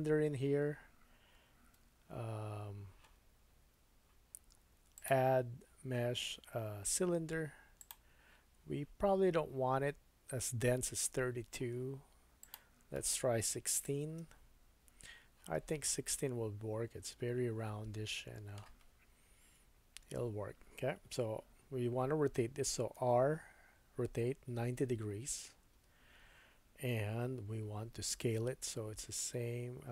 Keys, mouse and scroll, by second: 0.5-0.9 scroll down 4, 1.7 Tab, 3.8 Tab, 4.9-7.9 drag, 8.0-10.5 drag, 10.3-11.3 scroll down 6, 11.3-11.7 scroll up 1, 12.4-13.7 drag, 15.9 middle click, 19.6 KP_1, 22.8-29.9 drag, 22.9 r, 27.7 s.